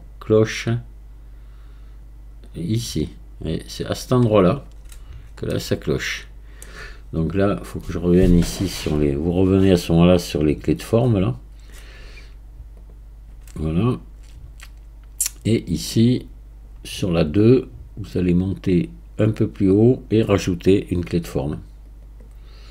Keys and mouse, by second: 5.6-6.7 middle drag, 9.0 click, 12.8 click, 18.2-19.7 drag, 21.9-22.7 middle drag.